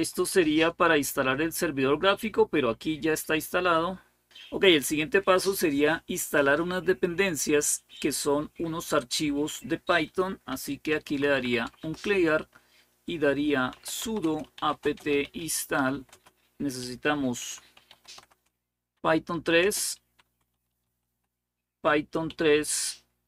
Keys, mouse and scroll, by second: 0.0-0.6 typing, 10.0-11.7 typing, 13.3-23.2 typing.